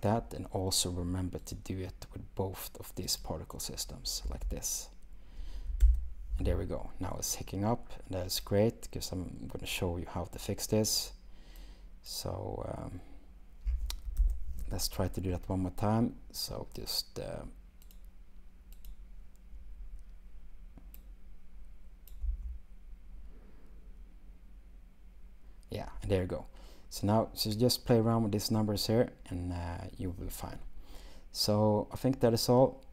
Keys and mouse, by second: 1.5 click, 3.2 click, 4.5 space, 8.4 shift+drag, 11.6-12.1 drag, 13.7 space, 14.6 shift+space, 16.8 shift+click, 18.9 click, 22.4 space.